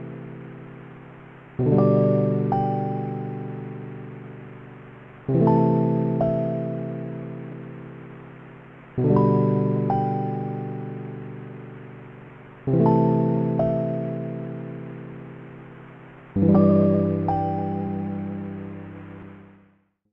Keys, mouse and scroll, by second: 1.1 b.